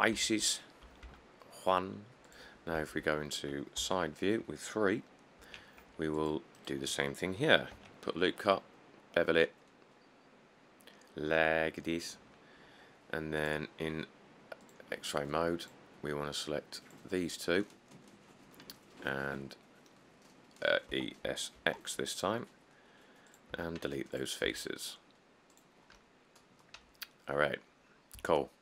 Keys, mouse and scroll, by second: 0.4 Tab, 1.3 Tab, 3.0 3, 4.0 Tab, 5.6 ctrl+r, 7.9 ctrl+b, 21.1-21.8 typing, 23.7 x, 24.7 Tab, 27.1 middle click, 27.1 middle click, 27.2 middle click, 27.3-28.3 scroll, 28.3-28.6 scroll.